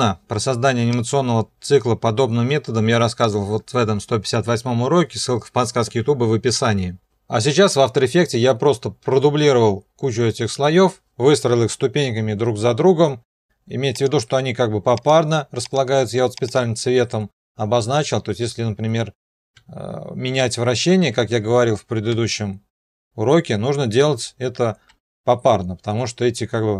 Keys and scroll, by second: 22.1 shift+r, 24.9 r.